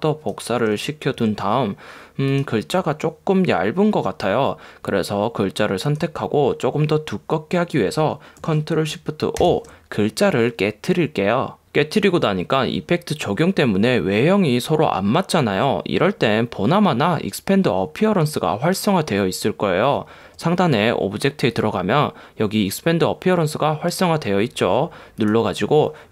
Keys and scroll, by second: 9.6 shift+super+o.